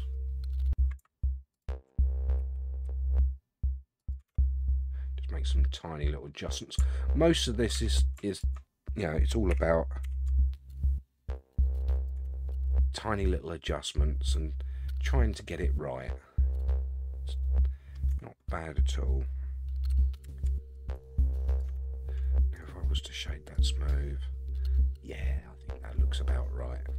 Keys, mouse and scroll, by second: 1.5 alt+click, 2.4 g, 4.3 Tab, 4.6 scroll down 1, 4.6-6.5 middle drag, 7.8 Tab, 8.3 alt+click, 9.5 g, 12.3 Tab, 12.5-18.0 middle drag, 18.1 Tab, 19.9 g, 21.8 Tab, 22.5-23.6 right drag, 24.1-26.9 middle drag.